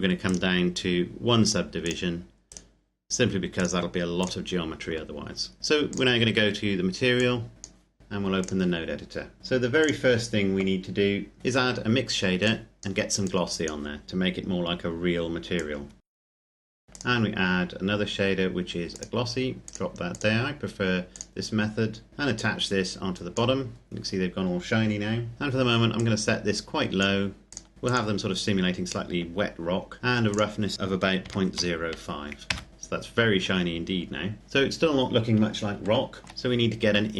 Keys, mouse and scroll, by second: 0.5 right click, 1.7 click, 2.8 right click, 3.8 click, 5.9 click, 9.7 click, 10.7-11.4 scroll up 1, 12.4 click, 16.8 click, 25.9 click, 30.2 click, 31.1 KP_Decimal, 31.4 KP_0, 31.8 KP_5, 32.5 KP_Enter, 34.4-35.6 scroll down 1, 36.2 shift+middle click.